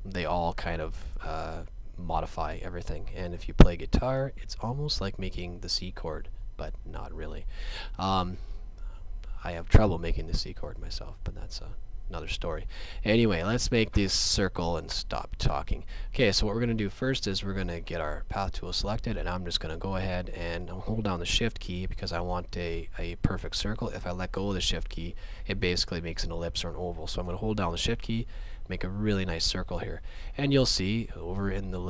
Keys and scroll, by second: 4.1 space, 6.8 shift+space.